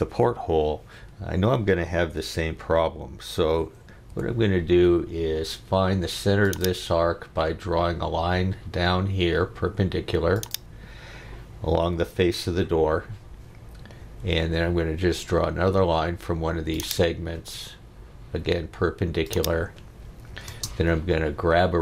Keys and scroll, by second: 4.1 l, 14.0 Escape, 20.5 space.